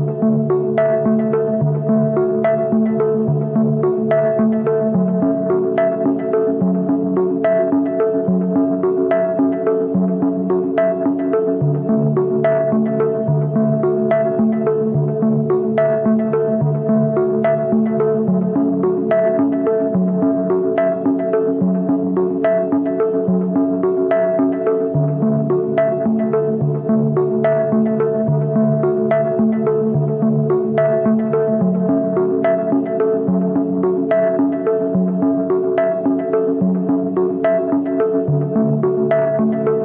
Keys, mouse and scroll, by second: 1.1 Return, 4.7 double click, 6.0 ctrl+t, 8.2 Return, 10.3 double click, 14.5-16.6 scroll up 1, 16.6 double click, 17.7-19.6 scroll up 1, 36.5 ctrl+z, 37.0 ctrl+click.